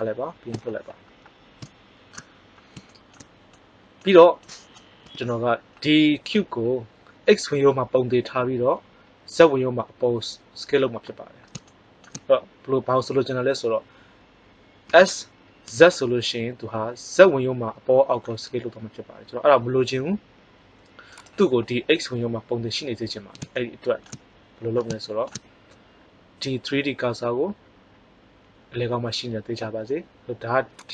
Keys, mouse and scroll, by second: 1.1-3.0 middle drag, 5.0 KP_1, 11.6-12.9 middle drag, 14.8 s, 23.5-25.1 middle drag, 30.8-30.9 drag.